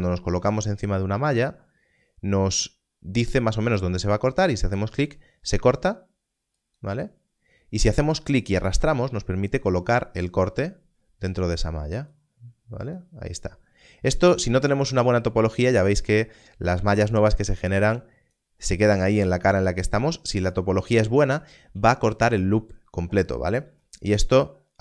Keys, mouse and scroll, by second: 4.9 click, 14.9 scroll up 1, 17.1 click, 24.2 click.